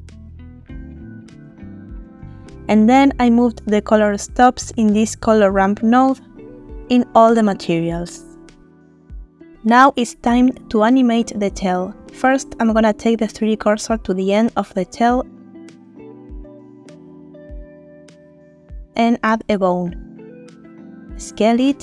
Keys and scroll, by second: 12.4 Tab, 16.3 shift+s, 17.8 Tab, 19.4 shift+a, 21.2 s.